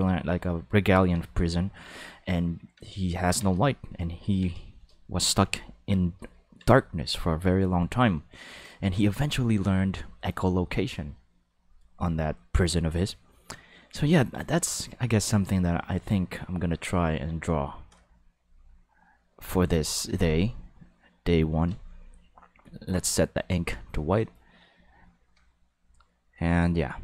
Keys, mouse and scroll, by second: 1.3 ctrl+middle click, 2.8 ctrl+middle click, 3.7 shift+middle click, 4.1 ctrl+middle click, 4.6 shift+middle click, 5.5 ctrl+middle click, 6.3 ctrl+middle click, 6.8 shift+middle click, 7.4 ctrl+middle click, 19.7 click, 21.7 click, 22.5-23.4 drag.